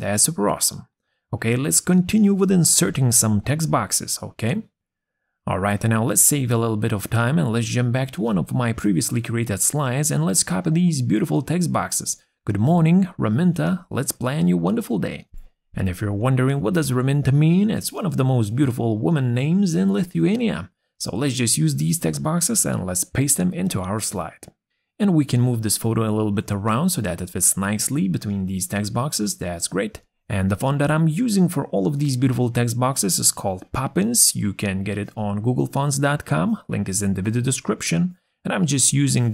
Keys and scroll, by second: 16.3 ctrl+c, 20.9 ctrl+v.